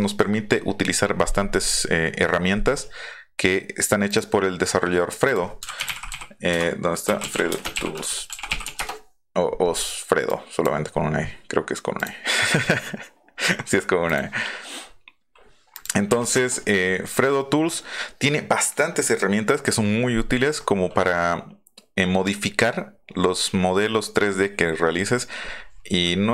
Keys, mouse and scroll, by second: 4.1 click, 5.2 click, 5.4-8.2 typing, 8.7 Return, 10.2 click, 11.9 click, 14.0 click, 15.7 click.